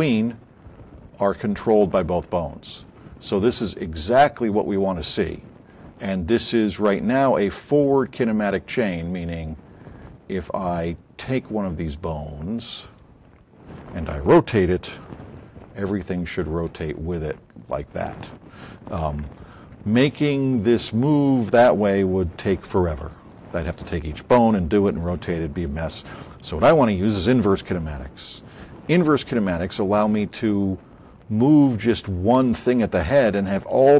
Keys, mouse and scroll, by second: 7.6 middle click, 9.2 click, 15.1 e, 16.3-17.8 drag, 18.5 ctrl+click, 19.0 z, 19.2 click.